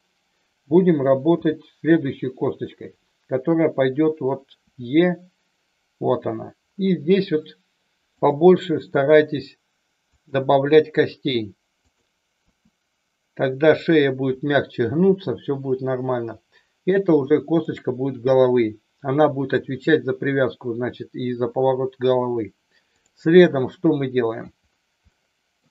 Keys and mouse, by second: 1.3 g, 2.4 click, 4.7 e, 6.0 e, 8.1 click, 8.9 e, 10.1 click, 10.4 e, 11.8 click, 12.5 e, 17.5 click, 23.6 shift+middle click, 25.1 shift+middle click.